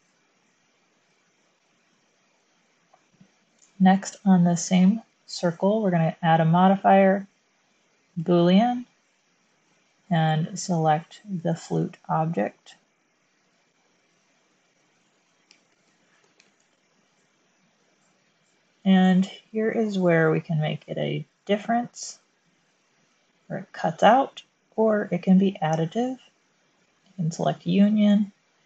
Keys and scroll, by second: 15.6-16.4 typing, 16.5 Return.